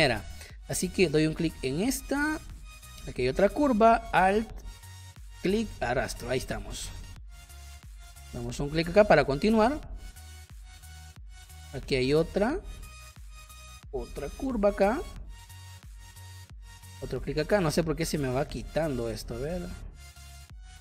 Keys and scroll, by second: 6.2 space.